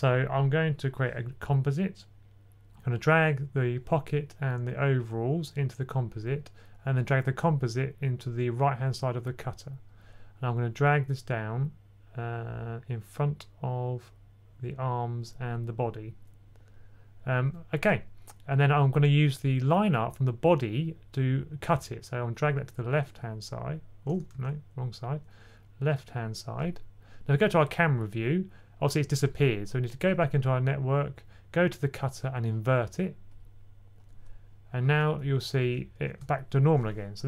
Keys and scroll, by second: 24.2 super+z, 35.5-35.8 typing.